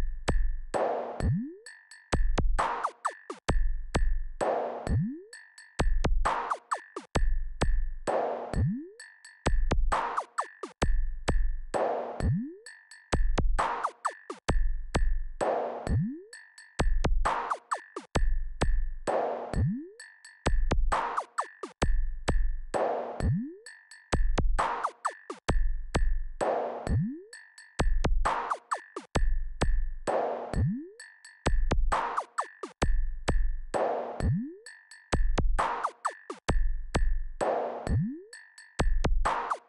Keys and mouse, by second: 7.7 click, 10.5-14.9 drag.